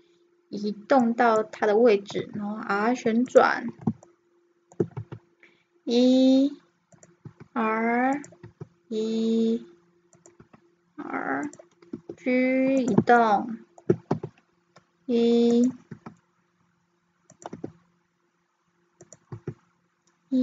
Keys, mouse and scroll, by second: 2.2 r, 4.1 middle click, 5.0 e, 7.2 r, 8.4 e, 10.4 r, 11.9 g, 13.2 middle click, 14.1 e, 15.9 r, 17.6 g, 19.4 e.